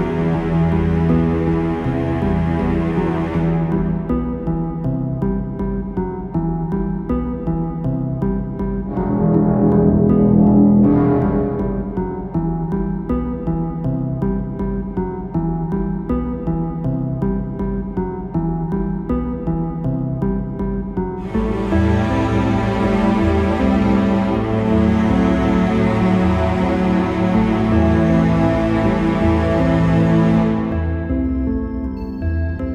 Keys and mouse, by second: 1.2 click, 5.3-9.4 right drag, 10.4 click, 10.8-12.0 middle drag, 12.0-14.1 right drag, 14.1 middle click, 14.6 click, 14.8 middle click, 17.9 click, 18.1 middle click, 20.8 middle click, 21.5-22.7 drag, 22.7-24.2 middle drag, 24.2-26.8 right drag, 26.7-29.6 drag, 29.6-31.3 right drag, 31.8 right click, 32.2 click.